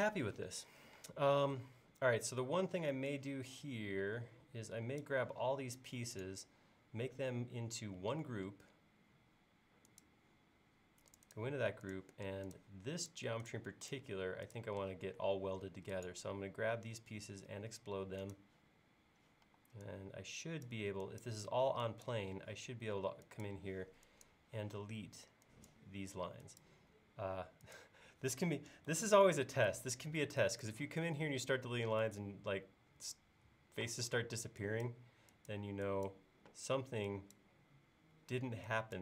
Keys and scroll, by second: 1.0 space, 19.5 e, 29.0 super+z.